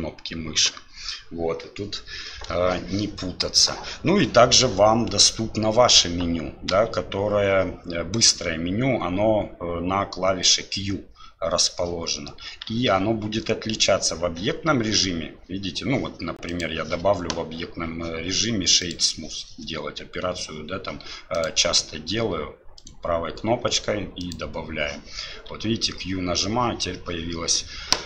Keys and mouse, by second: 14.8 q, 16.6-18.9 drag, 21.5-24.9 drag.